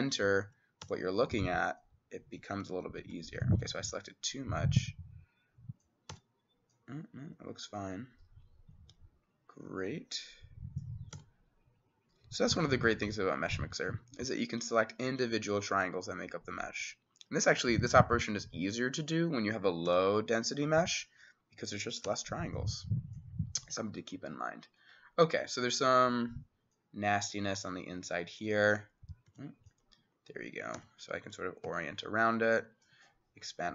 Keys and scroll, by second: 0.0 [, 0.9 x, 2.8 ctrl+z, 3.2 ctrl+z, 6.2 x, 11.2 x, 19.9 x, 22.1 x, 23.6 Escape, 29.3 c, 30.8-32.2 typing.